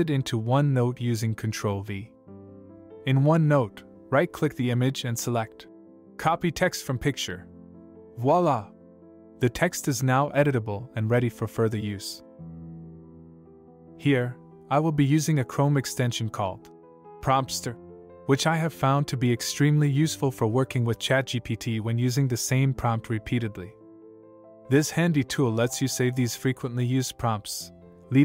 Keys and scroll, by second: 0.1 alt+Tab, 2.5 ctrl+v, 9.4 ctrl+v, 12.4 ctrl+v.